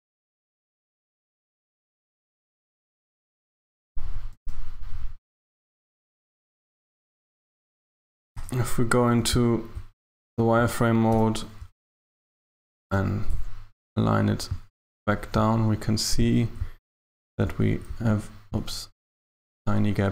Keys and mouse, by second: 1.7 g, 4.4 a, 5.5 a, 5.7 Tab, 6.0 KP_1, 8.3 z, 11.2 n, 12.7 g.